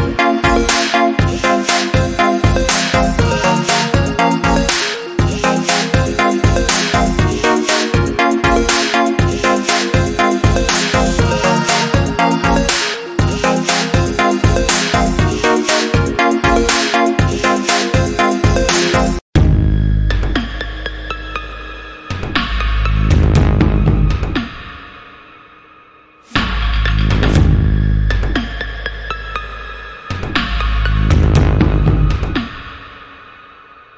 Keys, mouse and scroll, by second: 0.5 click, 7.2-8.3 scroll down 1, 8.3 click, 12.7-13.6 scroll down 1, 13.6 click, 15.6 ctrl+click, 16.1 alt+scroll down 2, 18.8 click, 24.1 alt+scroll down 1, 26.0 click, 28.3 ctrl+c, 29.2 click, 30.3 ctrl+v, 31.1 click.